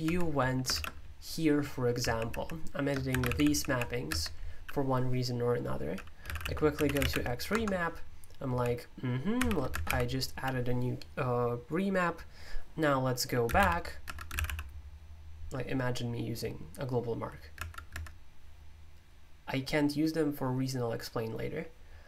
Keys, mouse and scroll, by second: 0.0 Escape, 0.7 shift+g, 1.9-4.1 typing, 6.1-9.8 typing, 9.7 Escape, 13.4-14.8 typing, 17.5 Escape, 17.8 Escape.